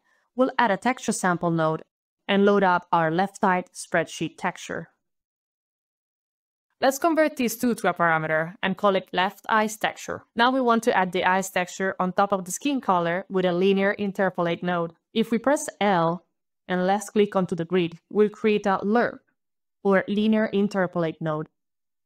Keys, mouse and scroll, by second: 0.2-1.8 typing, 2.1 Return, 2.3 click, 2.9 click, 3.1-4.0 typing, 6.2 click, 6.7 click, 8.1 click, 8.4-9.9 typing, 15.7 click, 15.9 l, 16.5 click, 16.6 click, 16.7 l, 17.7 click.